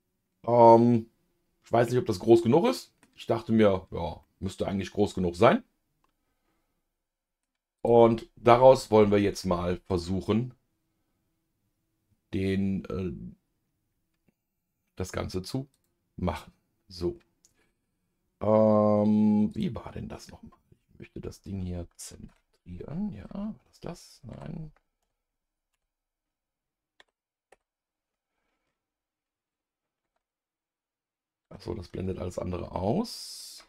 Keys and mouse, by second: 4.2-7.4 middle drag, 7.8 click, 9.0-10.9 middle drag, 15.7 click, 19.5 click, 22.3 KP_Divide, 24.3 KP_Divide, 25.0 KP_Multiply, 25.7 KP_Multiply, 27.0 KP_Divide, 27.5 KP_Divide, 30.0 KP_Divide, 31.4 KP_Divide, 32.0 KP_Divide, 32.6 KP_Divide.